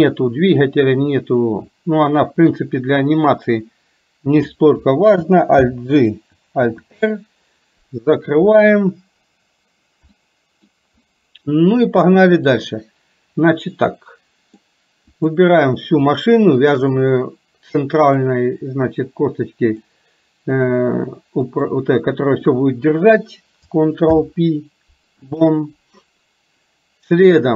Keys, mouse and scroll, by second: 5.6 alt+g, 6.6 alt+r, 10.3 middle click, 11.9-12.8 drag, 13.6-14.7 middle drag, 15.2 click, 16.8 shift+click, 18.2 click, 19.8 click, 21.7 click, 24.1 ctrl+p.